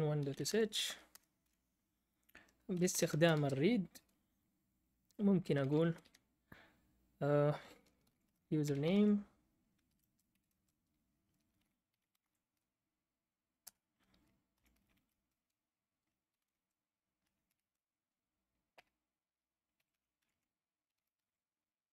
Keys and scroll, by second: 0.0-1.5 typing, 2.5-3.6 typing, 5.3-6.0 typing, 7.8-12.8 typing, 13.6 Return, 14.3-21.9 typing.